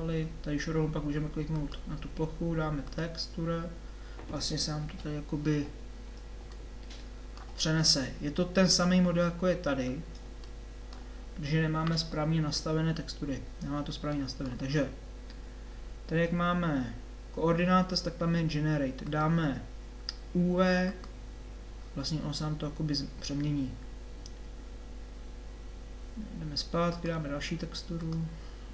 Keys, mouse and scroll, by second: 3.6-4.6 middle drag, 4.8 KP_7, 6.6 middle click, 10.2-14.3 middle drag, 28.0-28.7 drag.